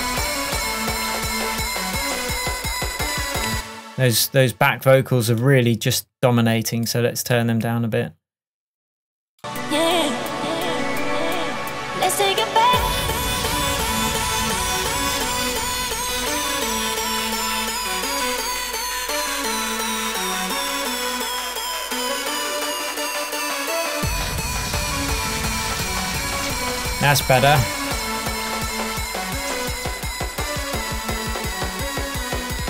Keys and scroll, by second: 3.6 space.